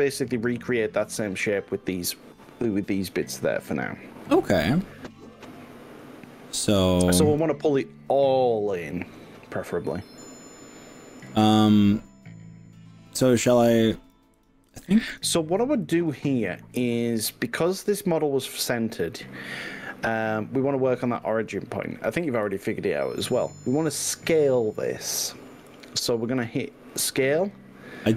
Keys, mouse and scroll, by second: 6.7 click, 9.3-10.5 drag, 13.5 click, 14.7-15.3 drag, 15.9 click, 18.7 s, 22.5 x, 25.7 y.